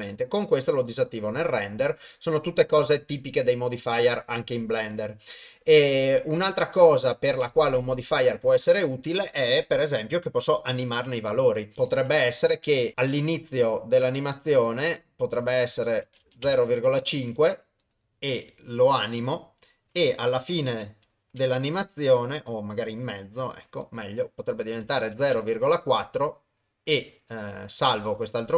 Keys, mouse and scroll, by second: 0.4 click, 0.9 click, 8.1 click, 10.6 shift+Left, 12.9 ctrl+alt+shift+g, 14.8-16.5 drag, 17.8 click, 21.3 shift+Right, 22.5-23.5 drag, 24.5 click, 26.9 click, 27.3 click.